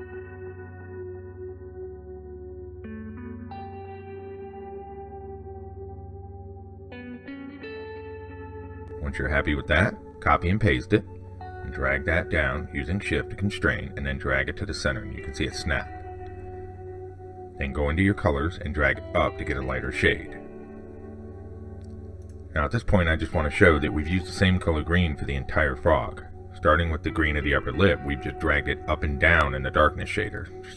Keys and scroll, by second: 10.2 ctrl+c, 10.4 ctrl+v.